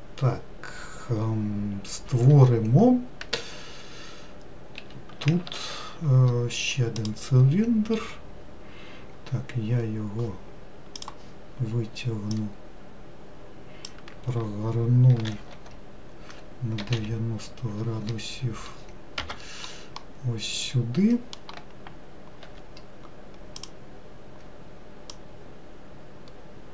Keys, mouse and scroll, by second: 5.0 3, 5.7 shift+a, 11.2-12.7 drag, 15.4 r, 20.3-22.7 middle drag, 22.7 3, 23.8 click, 25.4 click.